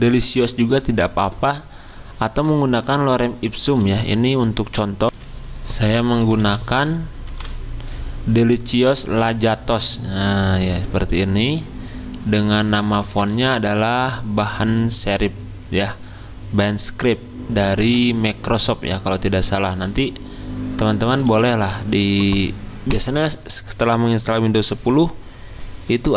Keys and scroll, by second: 5.0 F10, 5.1 ctrl+a, 5.1 ctrl+c, 6.4 ctrl+a, 7.3 ctrl+v, 19.7 ctrl+a, 21.2 ctrl+a.